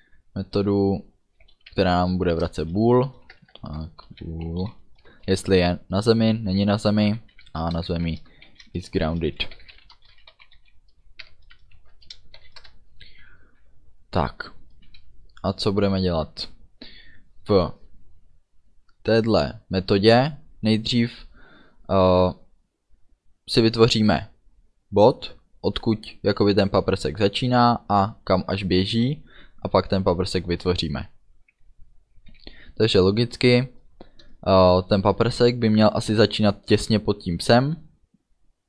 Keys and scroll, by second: 1.6 b, 1.8 o, 2.5 Return, 3.4-5.2 typing, 7.6 shift+i, 7.9 s, 8.6 shift+g, 9.6-12.4 typing, 11.8 Right, 12.6 Return.